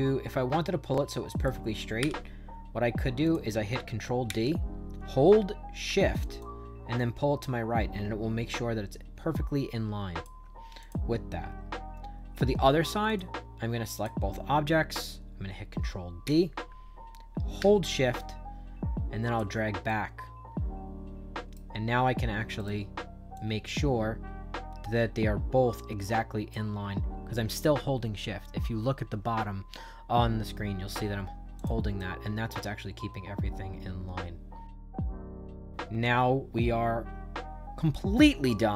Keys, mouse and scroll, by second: 3.1 click, 4.2 ctrl+d, 6.3-10.1 shift+drag, 10.7 click, 13.0 click, 13.9 shift+click, 16.2 ctrl+d, 18.1-19.3 shift+drag, 19.8-21.5 right drag, 22.5 right click, 23.3-26.4 shift+drag, 31.5 click, 31.9-38.7 right drag.